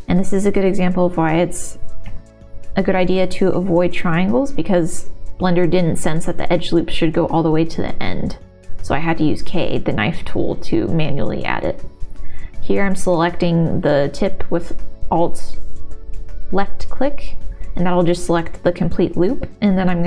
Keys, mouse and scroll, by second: 1.4 middle click, 2.3 k, 4.4 middle click, 5.8 g, 6.8 click, 7.1 3, 7.5 middle click, 8.1 middle click, 9.3 x, 10.7 2, 11.0 middle click, 12.1 e, 14.0 s, 15.1 click, 15.6 e, 17.0 s, 17.4 click, 18.5 shift+middle click, 19.0 shift+middle click.